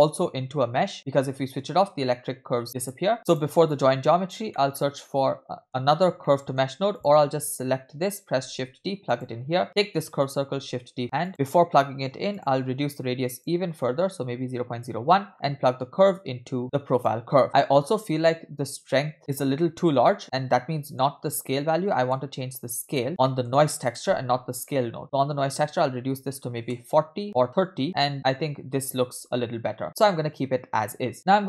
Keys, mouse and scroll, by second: 0.9 click, 2.8 click, 3.1 click, 3.1 middle click, 3.1-3.4 scroll up 2, 3.7 click, 4.5-5.7 middle drag, 6.1-6.4 scroll down 2, 6.3 middle click, 7.0 click, 8.4 shift+d, 9.6 click, 10.6 shift+d, 11.3 middle click, 11.4-12.3 scroll up 3, 12.3 scroll up 1, 12.4-14.8 drag, 16.2 click, 17.4 scroll down 2, 17.5 space, 17.8-18.8 scroll up 3, 18.8 space, 19.2 click, 19.2 middle click, 19.2 scroll up 2, 19.3 space, 20.2 middle click, 20.2 scroll down 1, 21.1-21.9 scroll up 1, 21.9-22.8 scroll up 3, 21.9 middle click, 22.9 click, 23.2 middle click, 23.9 click, 24.6 click, 25.0-26.8 drag, 27.2 click, 28.1-28.6 scroll down 2, 28.1 space, 28.6 space, 29.0 space, 30.8 space, 31.1-31.4 scroll down 4.